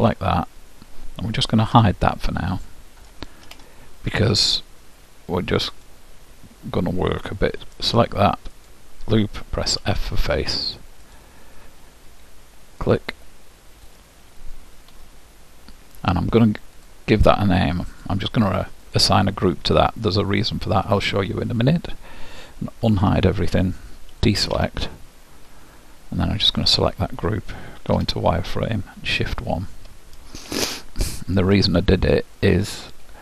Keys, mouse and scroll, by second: 0.6-3.4 middle drag, 1.8 h, 5.9-7.7 drag, 7.8-10.4 drag, 9.8 f, 11.2-14.7 drag, 16.8-20.6 drag, 23.1 alt+h, 24.4 a, 26.6-28.4 drag, 28.0 z, 30.8-33.2 middle drag.